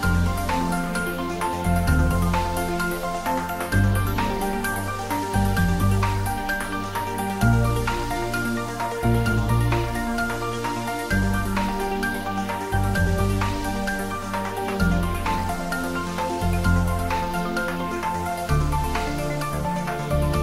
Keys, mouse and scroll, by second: 0.3 middle click, 1.1 ctrl+middle click, 2.3 middle click, 2.7 ctrl+s, 3.7-5.6 drag, 5.6-8.0 drag, 9.7 click, 11.4-14.6 drag, 15.1 click, 17.5-18.6 drag, 18.6 click.